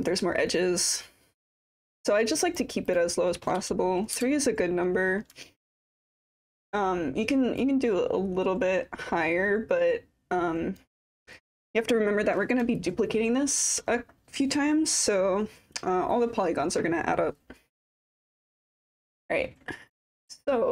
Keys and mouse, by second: 3.1-4.9 drag, 5.6 alt+click, 7.8-10.9 drag, 12.8 alt+click, 19.9 click.